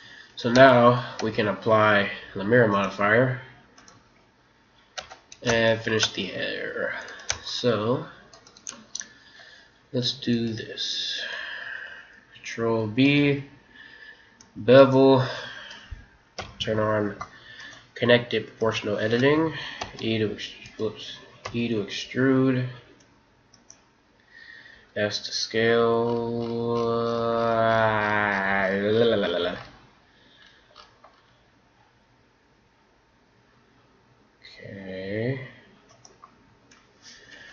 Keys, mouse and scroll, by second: 0.5 Tab, 1.2 Tab, 2.7-5.3 drag, 5.0 Tab, 5.5 click, 5.7-7.0 middle drag, 7.0-9.9 right drag, 8.8-10.8 middle drag, 12.9 ctrl+b, 16.3 o, 17.5-19.4 drag, 19.8 r, 21.5 e, 24.8 s, 37.3 KP_1.